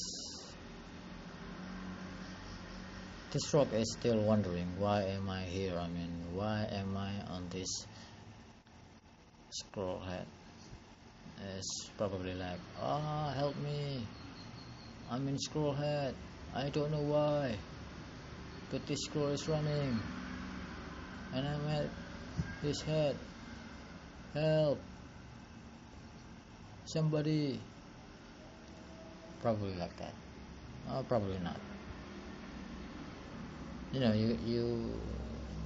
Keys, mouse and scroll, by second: 3.3-3.8 scroll up 2, 4.1 scroll down 2, 4.4 scroll up 3, 4.8 shift+middle click, 5.4-6.4 scroll up 2, 6.4 scroll down 3, 9.7 scroll down 5, 10.2 shift+middle click, 13.5 click, 14.6 click, 15.0 scroll up 1, 24.8 click, 26.8 click.